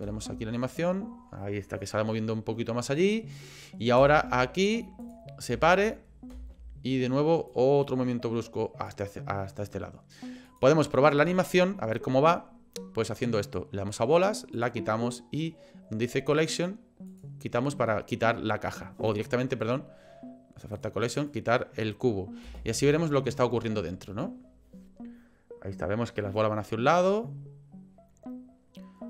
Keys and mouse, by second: 0.1 space, 4.0 space, 5.0 click, 5.5 space, 6.3 space, 7.5-8.9 drag, 10.5 click, 14.5 click, 17.1 click, 20.7 click, 21.2 click, 22.4 space.